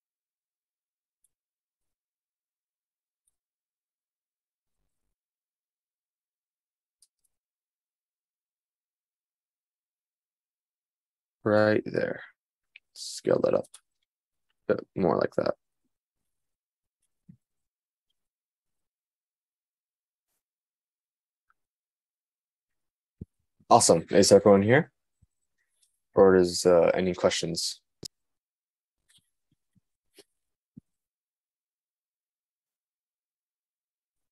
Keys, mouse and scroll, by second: 0.3 s, 2.7 g, 11.7 s, 16.6 click, 17.1-17.4 scroll up 1.